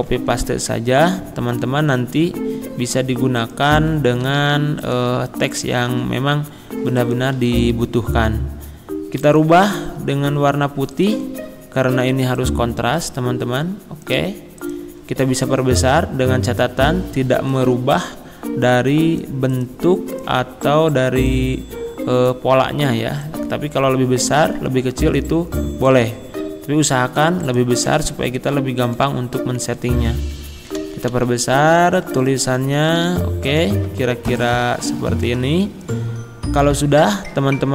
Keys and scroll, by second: 0.4 ctrl+a, 1.5 ctrl+c, 4.3 ctrl+c, 5.9 ctrl+v, 7.4 ctrl+a, 28.3 shift+Return, 29.8 ctrl+a, 30.9 ctrl+], 32.0 ctrl+[.